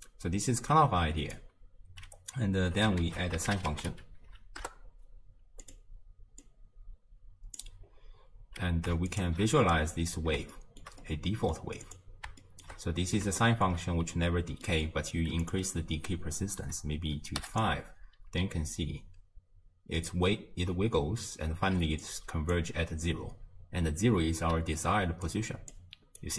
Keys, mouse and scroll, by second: 3.1 ctrl+a, 6.4 click, 7.9-9.1 scroll up 1, 9.1 alt+shift+click, 10.2-10.5 scroll down 2, 10.5-11.9 shift+middle drag, 11.9 click, 12.4-12.9 shift+middle drag, 12.9 scroll down 3, 13.4-14.9 shift+middle drag, 14.9-15.5 scroll up 1, 15.5-17.6 drag, 21.8 d, 22.0-22.5 drag, 22.5 d, 24.5-25.2 d, 25.3-25.7 drag, 25.7-26.1 d, 26.2 right click.